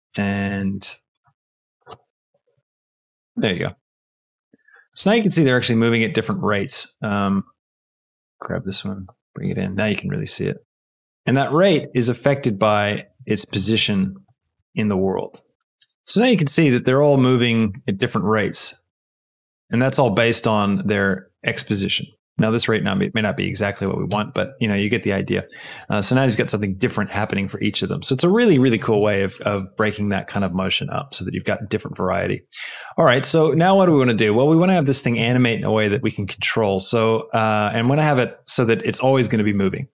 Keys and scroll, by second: 0.3 space, 6.6 space, 7.7 g, 13.5 space, 14.5 shift+space, 24.1 space.